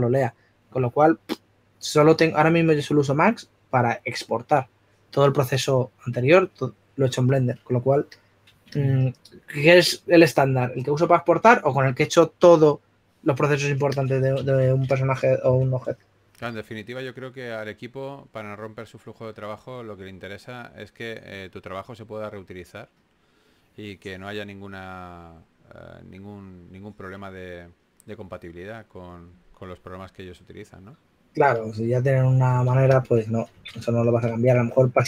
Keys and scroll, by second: 10.7 s, 16.9-17.7 typing, 19.4 2, 22.4 s, 26.1-27.3 typing, 33.4 s.